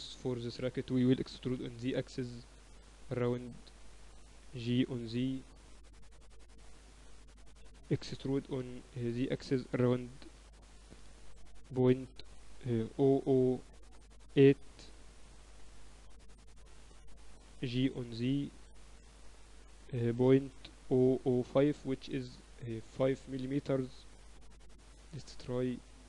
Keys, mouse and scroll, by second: 1.0 Tab, 1.3 a, 1.5 a, 2.2 e, 4.8 ctrl+z, 5.6 g, 8.8 e, 18.4 g.